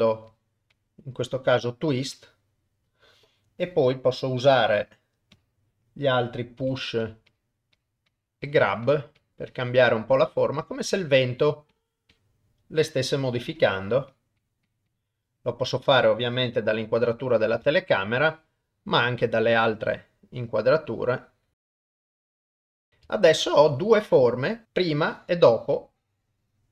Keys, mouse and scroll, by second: 2.2-4.4 drag, 5.4 click, 6.6 f, 7.3 click, 7.8 click, 8.4 click, 8.9 click, 9.2 click, 9.5 click, 10.3 click, 10.7 click, 11.0 click, 11.5 click, 12.1 click, 12.8 click, 13.4 click, 13.8 click, 14.4 click, 14.7 click, 14.9 click, 16.6 middle click, 17.8 ctrl+middle click, 18.2-19.5 middle drag, 19.6 middle click, 20.8 click, 21.6 ctrl+z, 21.9 click, 22.0 click, 22.3 middle click, 22.4 click, 22.5 shift+middle click, 22.6 click, 22.8 click, 22.8 middle click, 23.1 shift+middle click, 23.8 middle click, 24.6-26.7 drag.